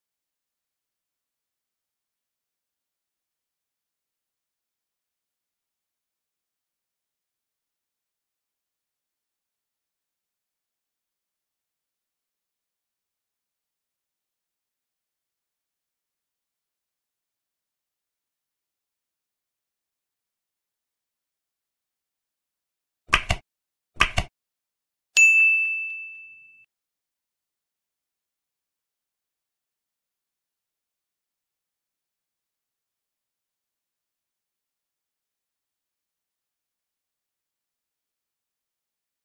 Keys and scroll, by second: 0.0 ctrl+s, 0.7 Down, 1.4 Down, 1.6 End, 2.5 Down, 3.9 space, 5.0 Down, 5.5 ctrl+s, 7.5 space, 8.9 ctrl+s, 9.1 ctrl+s, 9.5 End, 9.6 space, 10.7 ctrl+BackSpace, 11.5 ctrl+BackSpace, 12.7 ctrl+s, 13.1 End, 13.5 space, 15.8 End, 16.5 ctrl+s, 17.0 Down, 17.4 ctrl+s, 19.6 ctrl+End, 20.1 ctrl+s, 27.8 Right, 30.1 ctrl+s, 32.0 ctrl+s, 34.3 ctrl+s, 34.9 Right, 36.4 ctrl+s, 36.7 Right, 38.2 End, 39.1 space.